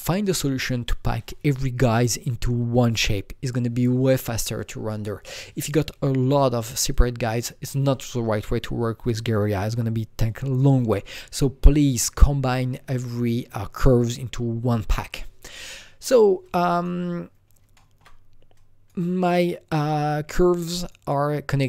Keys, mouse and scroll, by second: 6.9 shift+click, 6.9-9.5 shift+drag, 16.4-18.5 drag, 17.4 scroll down 1, 17.7 alt+middle click, 18.5-21.6 drag.